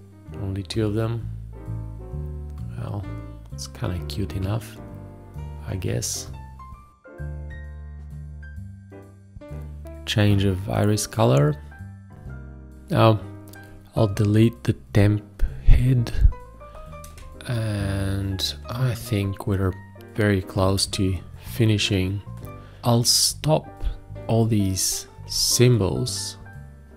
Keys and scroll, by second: 0.0 ctrl+s, 0.4 ctrl+Tab, 0.5 ctrl+space, 2.5 ctrl+Tab, 2.9 ctrl+s, 3.8 ctrl+Tab, 5.8 ctrl+Tab, 6.0 ctrl+Tab, 8.2 space, 8.4 ctrl+s, 10.4 ctrl+s, 10.5 ctrl+a, 10.9 ctrl+a, 11.2 ctrl+Tab, 11.6 space, 11.9 ctrl+1, 20.8 space, 25.2 v.